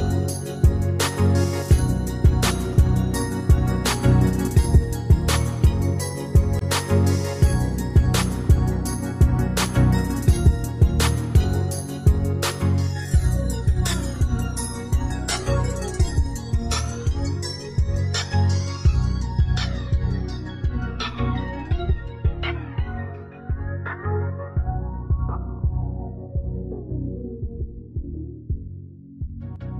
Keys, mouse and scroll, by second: 1.4 alt+click, 27.6-28.3 ctrl+scroll up 1.